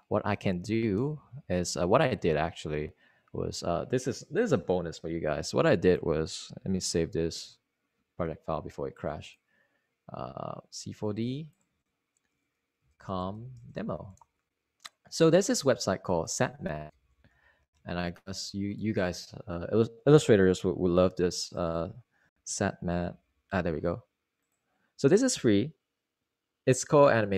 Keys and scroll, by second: 9.3 super+s, 14.8-17.8 typing, 17.8 super+Tab, 19.2-21.0 typing, 21.2 Return, 24.7 u, 25.4 m.